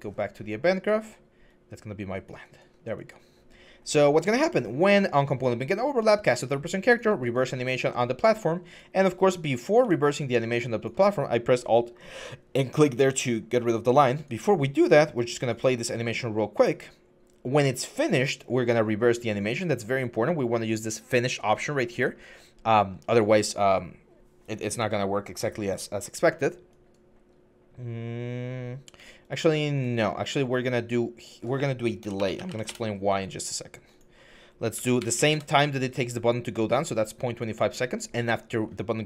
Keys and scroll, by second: 31.7-32.4 typing, 32.5 Return, 34.5-35.3 typing.